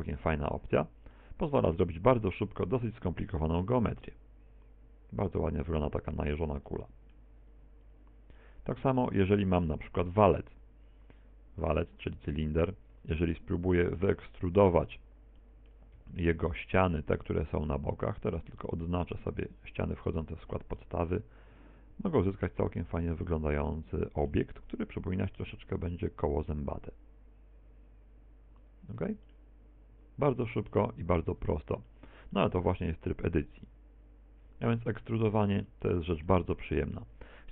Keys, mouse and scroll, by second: 0.3 click, 1.1 middle click, 2.5 Tab, 2.8 scroll down 4, 3.2 middle click, 7.1 middle click, 7.1 x, 9.5 shift+a, 13.0 Tab, 13.4 middle click, 14.3-15.1 scroll up 4, 15.5 middle click, 16.0 c, 19.3 middle click, 19.7 c, 23.3 middle click, 25.5 alt+e, 28.9 click, 29.0 Tab, 29.2 middle click, 31.1-31.5 scroll down 4, 31.9 shift+middle click, 32.4 middle click, 35.5 scroll down 1, 35.7 middle click, 36.7 middle click.